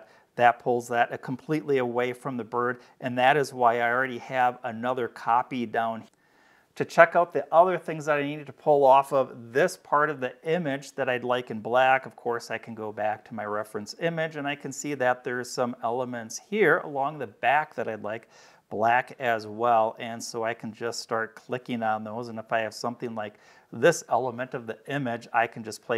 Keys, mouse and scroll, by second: 2.2-2.5 scroll down 2, 3.4 space, 3.8 click, 12.0 click, 18.5 click, 20.7 click, 21.9-25.5 drag.